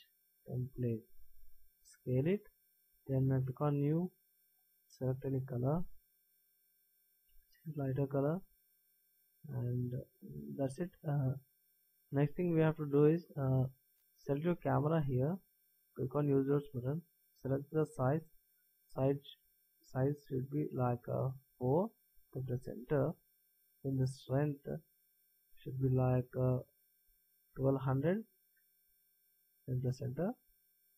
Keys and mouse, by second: 1.8 s, 4.0-7.1 drag, 24.5-26.3 drag, 28.8 KP_0.